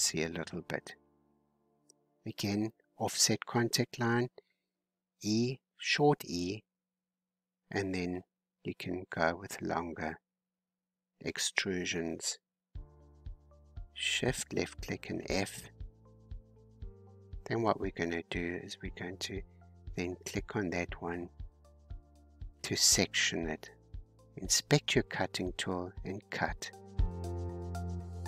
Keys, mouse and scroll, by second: 1.0 click, 1.5-3.1 shift+middle drag, 3.1 click, 3.9-5.3 middle drag, 5.3 e, 6.9 e, 8.1 e, 9.3-10.5 middle drag, 10.5 e, 11.0 e, 11.5 e, 12.0 e, 13.0 shift+click, 14.0 f, 14.4-15.1 scroll down 5, 15.2-18.5 shift+middle drag, 18.5-19.7 drag, 19.7-22.7 middle drag, 25.5-28.2 drag.